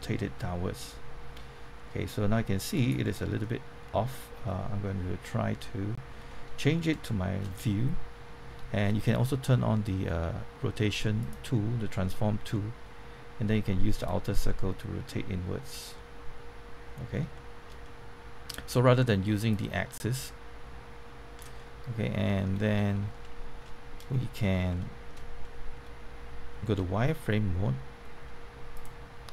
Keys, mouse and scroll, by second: 2.7 right click, 3.0-6.2 middle drag, 6.9 shift+middle click, 7.4 middle click, 8.9 middle click, 11.1 click, 12.5-13.9 middle drag, 14.0-15.9 drag, 15.9-18.9 middle drag, 19.5-21.5 drag, 21.5 middle click, 22.6 scroll up 1, 23.1 shift+middle click, 23.6 shift+middle click, 24.7 shift+middle click, 26.7 z, 28.7 click.